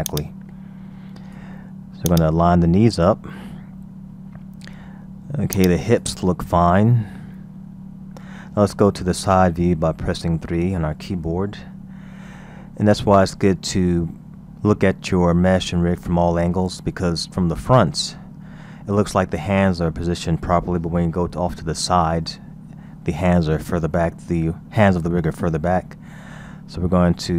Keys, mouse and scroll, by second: 0.1-3.4 drag, 3.4-3.9 scroll up 1, 3.9-5.6 scroll down 2, 5.6 click, 6.3-6.6 scroll up 4, 7.9-9.9 scroll down 3, 9.9 KP_3, 10.7-11.2 scroll up 1, 11.2-11.9 scroll down 2, 11.9-12.9 scroll up 2, 12.9-15.2 scroll down 2, 15.2-17.2 scroll up 1, 18.1 KP_1, 21.9 KP_3, 26.0-27.3 scroll up 5.